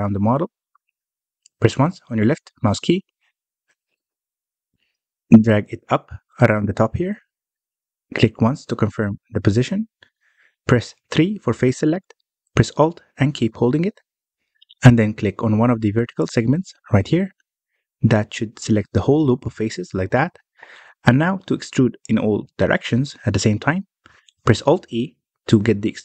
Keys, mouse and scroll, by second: 0.3 Tab, 1.2 ctrl+r, 10.5-10.9 scroll up 2, 10.9-11.2 scroll down 2, 11.2 shift+middle click, 11.5-12.3 scroll up 1, 12.3 3, 18.0 alt+click, 20.5-21.0 scroll down 2, 21.0-24.7 middle drag, 25.5 alt+e.